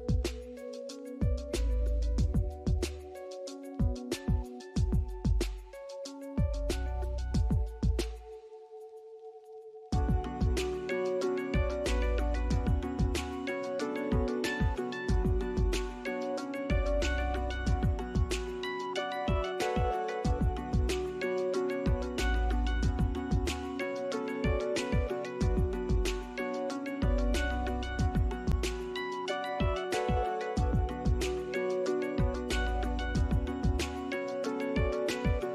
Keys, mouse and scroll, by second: 1.1 alt+click, 1.4 alt+middle click, 1.7-2.0 alt+scroll up 1, 2.3 alt+middle click, 2.6 alt+click, 3.6 alt+middle click, 5.4 scroll up 1, 8.5 scroll down 1, 8.8 alt+middle click, 9.2 alt+scroll up 1, 10.0 ctrl+click, 11.1 ctrl+click, 12.1 ctrl+click, 13.2 middle click, 17.1 alt+click, 19.5 scroll up 1, 20.8 ctrl+click, 21.9 alt+middle click, 23.4 alt+click, 26.3 scroll down 1, 27.0 alt+middle click, 27.7 alt+click, 28.0 scroll up 1, 28.9 alt+middle click, 29.3 alt+click, 29.7 alt+middle click, 30.6 scroll up 1, 30.9 alt+click, 32.8 ctrl+z, 33.5 ctrl+click, 34.1 ctrl+z, 34.3 ctrl+z, 34.9 ctrl+scroll down 1.